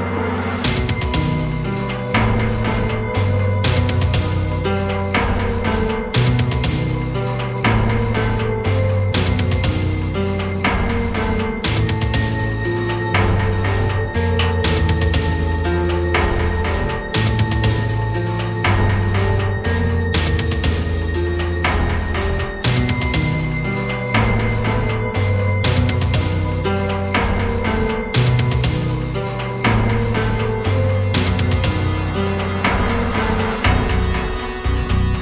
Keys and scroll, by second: 1.8 ], 8.3 ctrl+alt+z, 22.2 ctrl+alt+z.